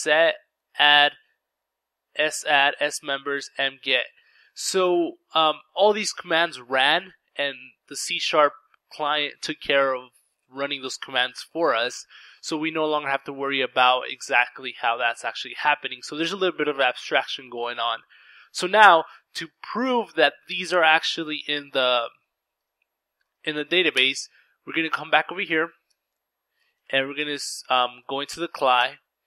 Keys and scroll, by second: 22.4-23.3 typing, 24.3 ctrl+c, 24.7-26.9 typing, 26.4 ctrl+r, 27.1 Return.